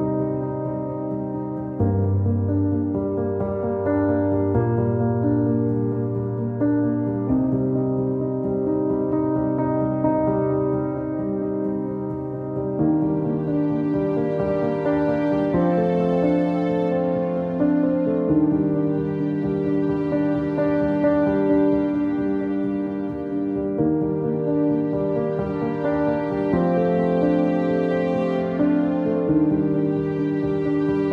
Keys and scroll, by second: 3.2 Delete, 10.5 Delete, 13.3 alt+x, 16.1 Delete.